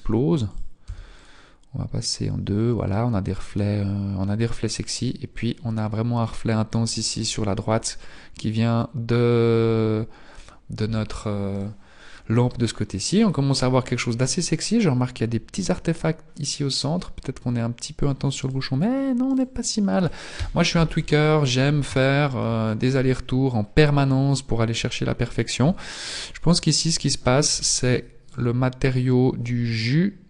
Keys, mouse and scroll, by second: 1.5 click, 11.4 right click, 18.5 right click, 19.4 right click, 20.4 KP_1, 20.8-22.0 scroll up 8, 22.0 shift+middle click, 22.0-22.4 scroll up 3, 22.6-23.4 scroll up 1, 23.4 scroll up 1, 25.8 Tab, 26.8 Tab, 27.4 z, 28.2 right click.